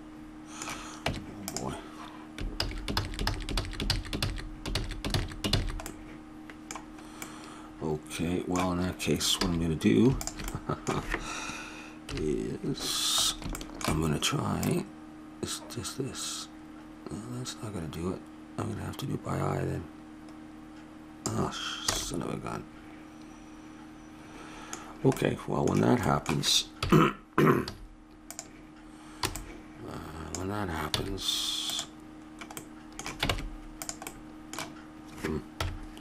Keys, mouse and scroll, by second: 1.0 Tab, 2.6 ctrl+z, 2.9 ctrl+z, 3.2 ctrl+z, 3.5 ctrl+z, 3.9 ctrl+z, 4.1 ctrl+z, 4.7 ctrl+z, 5.1 ctrl+z, 5.5 ctrl+z, 5.9-8.4 middle drag, 9.4 a, 10.2 click, 12.1 KP_3, 13.5-14.6 middle drag, 14.6-16.9 drag, 21.9 a, 22.0 middle click, 24.1 middle click, 26.8 KP_1, 27.7 z, 29.2 b, 31.0 x, 32.6 middle click, 33.3 ctrl+Tab, 35.6 KP_1.